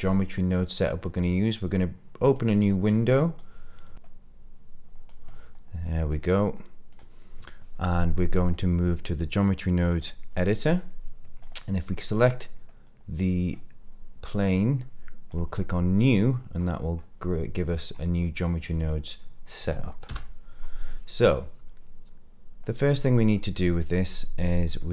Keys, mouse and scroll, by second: 1.1-2.7 drag, 3.3 click, 4.0-7.0 drag, 8.4-9.9 drag, 11.3 click, 12.6 click, 14.3 middle click, 15.2 click, 15.9 middle click, 16.5-17.2 scroll up 4, 17.2 middle click, 17.9 scroll up 2, 18.2 middle click, 20.2 n, 20.5 scroll up 2, 20.8 middle click, 22.6 click, 23.5 middle click, 24.4 middle click.